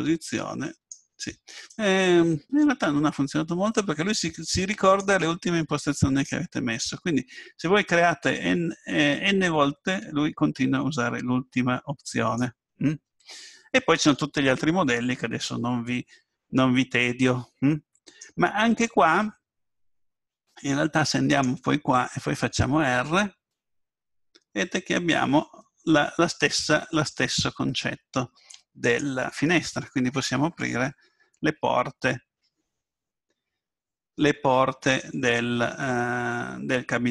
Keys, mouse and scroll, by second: 1.7-3.6 drag, 6.3-10.3 drag, 13.9-15.7 drag, 17.8-19.1 drag, 21.3-22.9 right drag, 22.9 r, 35.8-37.1 middle drag.